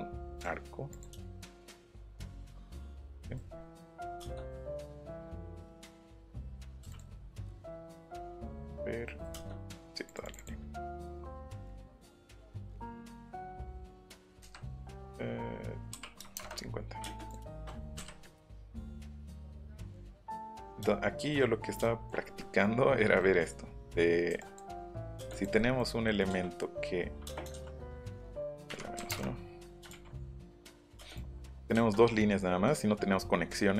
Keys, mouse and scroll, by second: 0.3 click, 0.9 click, 2.9 click, 4.8 click, 5.7 shift+click, 6.9 click, 9.4 space, 10.0 click, 10.2 click, 11.2 scroll up 2, 11.6 click, 12.2 scroll down 2, 12.2 m, 12.6 click, 15.9 KP_5, 16.2 KP_0, 16.3 KP_Enter, 17.3 click, 18.0 Delete, 18.2 middle click, 19.2 right click, 19.6 right click, 24.3 e, 24.4 click, 25.3 click, 27.2 space, 27.5 ctrl+c, 27.8 s, 28.2 click, 28.6 KP_Subtract, 29.0 KP_1, 29.1 KP_Enter, 31.1 click.